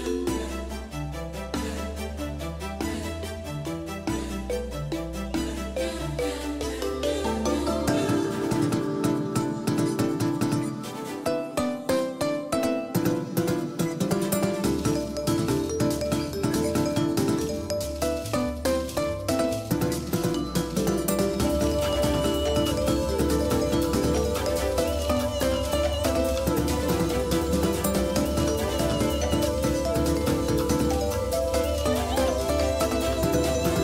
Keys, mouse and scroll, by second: 5.8-6.5 scroll down 1, 6.5-8.6 middle drag, 10.4-14.4 drag, 17.1-19.3 drag, 32.9-33.8 drag.